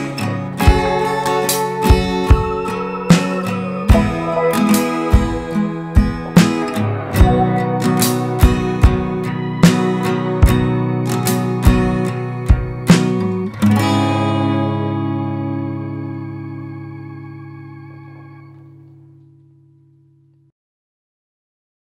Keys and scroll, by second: 11.7 ctrl+space, 12.1 ctrl+space.